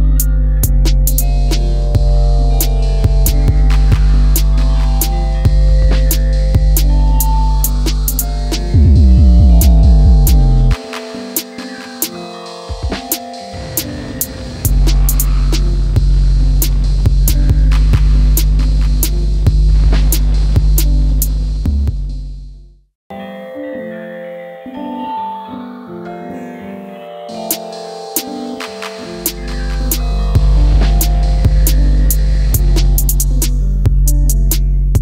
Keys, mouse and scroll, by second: 0.3 Up, 1.8 Up, 3.3 Up, 7.1 Up, 7.3 Up, 7.5 Up, 8.0 Up, 19.1 ctrl+middle click, 28.4 shift+click.